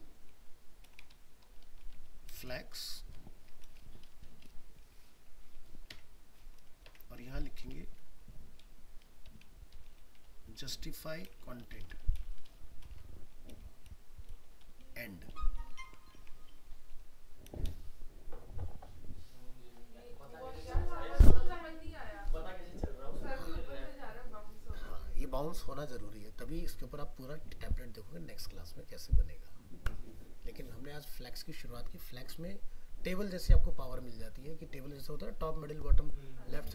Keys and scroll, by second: 15.8 ctrl+s, 16.2 alt+Tab.